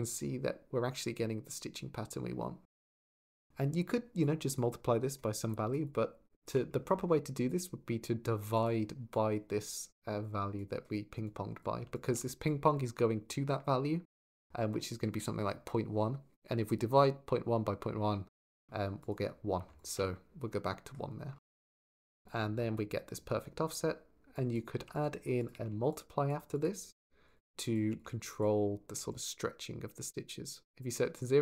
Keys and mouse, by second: 1.7 shift+click, 3.1 shift+click, 3.8 shift+middle click, 4.0 shift+click, 4.3 shift+middle click, 5.3 shift+click, 5.6 shift+click, 7.3-8.5 drag, 8.9 click, 11.1 click, 11.7 ctrl+shift+click, 12.0 click, 18.8 click, 19.6 ctrl+shift+click, 21.4 click, 22.0 ctrl+shift+click, 22.5 middle click, 24.6 g, 25.2 click, 25.5 shift+d, 25.7 click, 26.1 click, 26.4-27.2 drag, 27.4 click, 28.2 click, 29.1 shift+click.